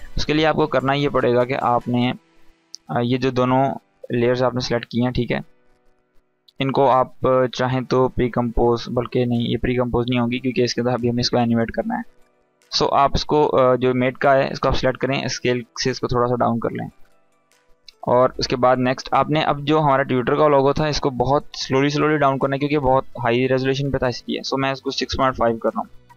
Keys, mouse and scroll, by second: 3.4 click, 4.1 shift+click, 8.8 click, 13.5 click, 14.2 s, 15.5 click, 15.5-17.4 drag, 23.6 click.